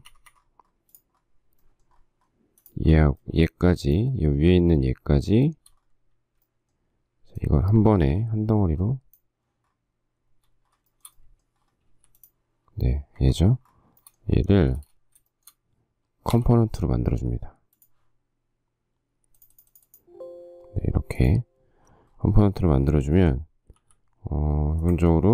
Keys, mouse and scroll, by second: 0.1 Escape, 0.3 Escape, 3.6 shift+middle click, 11.1 shift+middle click, 12.1 m, 13.4 Escape, 14.9 space, 15.5 shift+middle click, 16.5 g, 19.7 right click, 24.0 m, 25.1 ctrl+click.